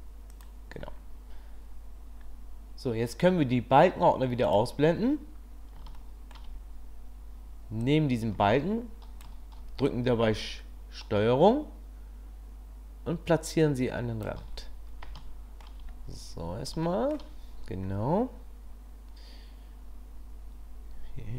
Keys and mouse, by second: 4.5 click, 6.0-6.3 shift+drag, 8.0 click, 9.9 click, 15.3-15.7 shift+middle drag, 17.0 shift+middle click.